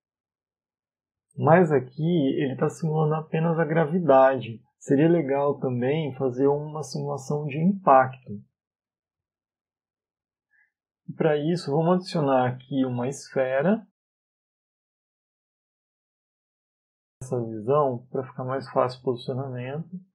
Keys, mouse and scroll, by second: 7.5 click, 8.3 click, 9.1-9.8 scroll down 3, 9.8 middle click, 10.5 middle click, 11.1 shift+a, 14.7 click, 16.1 KP_1, 16.8-17.4 scroll up 3, 18.5 g.